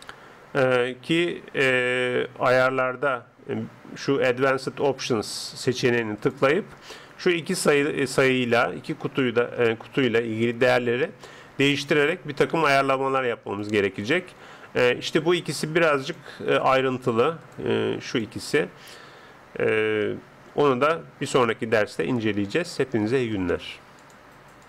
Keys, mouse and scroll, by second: 6.2 click, 13.4 click, 15.2 middle click.